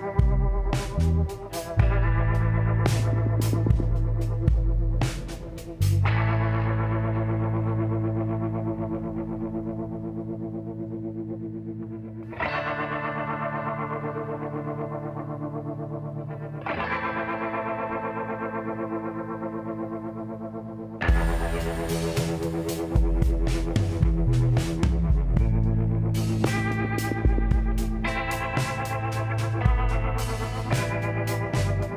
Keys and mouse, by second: 2.2 s, 3.9-7.7 drag, 6.8 x, 8.9-10.6 drag, 9.8 l, 10.6 s, 13.7-15.5 drag, 14.9 middle click, 15.5-16.7 middle drag, 17.1-19.0 middle drag, 20.0 middle click, 21.0 e, 23.8-25.5 drag, 25.3 middle click, 28.8 s.